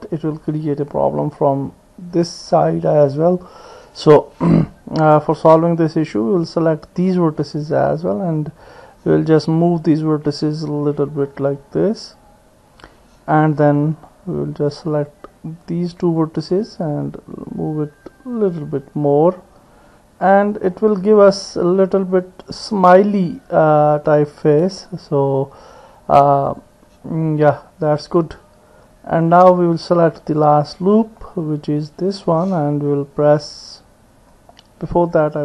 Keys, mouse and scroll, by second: 5.2 ctrl+z, 6.2-7.6 drag, 9.8-13.4 drag, 14.1-15.1 drag, 16.2-18.6 drag, 21.9 click, 23.3-24.8 drag, 26.5 click, 27.5 middle click, 28.3 click, 28.6 middle click, 30.5 alt+click, 31.3-32.4 middle drag, 33.4-34.6 middle drag, 35.3-35.4 drag.